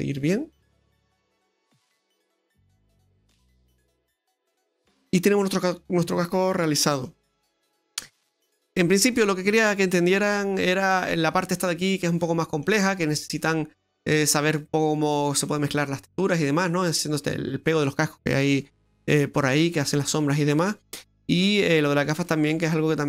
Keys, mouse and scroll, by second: 1.0 right click, 1.6-2.6 scroll down 4, 2.2 middle click, 6.5-6.9 scroll up 2, 6.9 middle click, 7.3 shift+middle click, 8.7-9.1 scroll up 2, 9.1-10.1 scroll down 1, 10.7 middle click, 12.6 middle click, 14.2 middle click, 15.3 middle drag, 16.3 middle click, 19.3-20.3 scroll up 1, 20.3-20.7 scroll down 2, 20.7 middle click, 22.3 middle click.